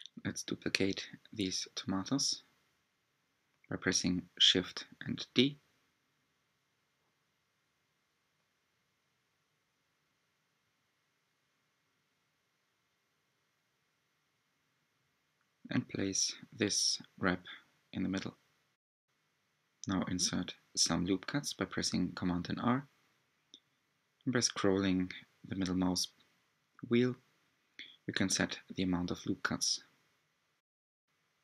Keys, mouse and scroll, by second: 0.1 shift+click, 0.1 shift+click, 0.4 click, 0.7-1.5 middle drag, 1.5-2.5 scroll up 2, 2.5 r, 8.7 click, 9.8 click, 10.2-11.2 scroll down 4, 11.4 g, 15.3 s, 20.0 middle click, 20.9-21.8 scroll up 6, 22.2 scroll down 1, 22.9 Tab, 24.0 r, 27.7-29.5 middle drag, 29.5 click, 30.4-30.7 scroll up 4.